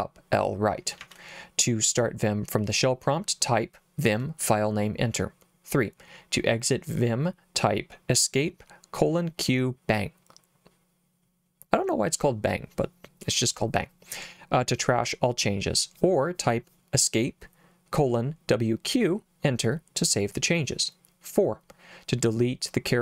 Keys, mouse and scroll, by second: 0.8 k, 1.0 k, 1.2 k.